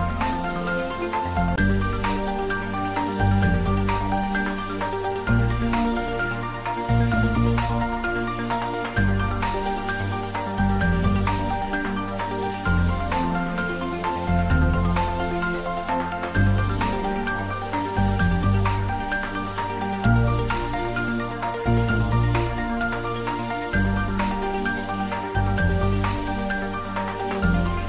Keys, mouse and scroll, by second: 13.5-13.9 scroll down 1, 14.4 s, 17.1-17.9 click, 19.4 9, 19.8 Return, 21.2 scroll down 1, 22.1 click, 23.8 0, 26.2 3, 26.9 Return.